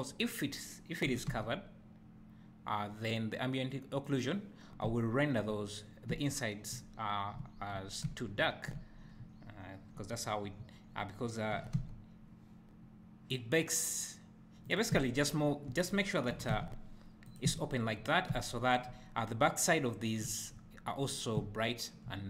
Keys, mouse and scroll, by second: 1.2 g, 4.2 right click, 4.9 `, 11.7 g, 14.8 click, 15.1 `, 16.4 g, 17.4 click, 17.6 `.